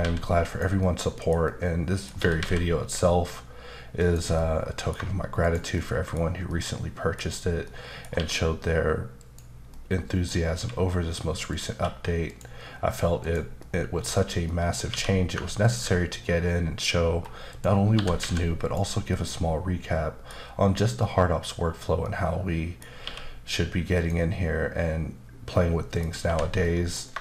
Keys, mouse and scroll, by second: 0.0-1.0 typing, 0.5 click, 0.8 middle click, 1.5 middle click, 2.2 typing, 4.0 click, 4.3 middle click, 5.4 shift+click, 5.7 middle click, 6.5 middle click, 7.3-7.6 scroll up 2, 7.6 middle click, 8.0 scroll down 1, 8.1 q, 9.2 click, 9.7 middle click, 10.5 q, 11.5 click, 11.7 q, 12.3 click, 12.8-13.2 scroll down 1, 13.2 click, 13.6 middle click, 14.4 middle click, 14.9 q, 15.6 ctrl+click, 16.6-17.5 scroll up 2, 17.5 click, 17.9 typing, 18.6 click, 19.1 middle click, 22.0 middle click, 23.0 q, 23.9 click, 25.9 click, 26.2 h, 26.6 middle click, 27.0 scroll down 1.